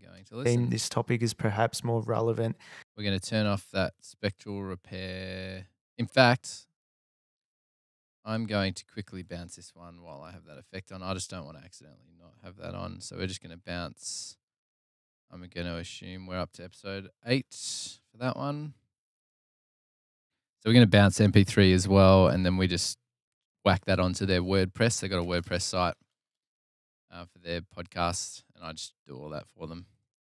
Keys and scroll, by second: 0.0 space, 2.4 space, 7.2 super+[, 7.4 super+[, 12.3 alt+super+b, 18.2-19.0 typing.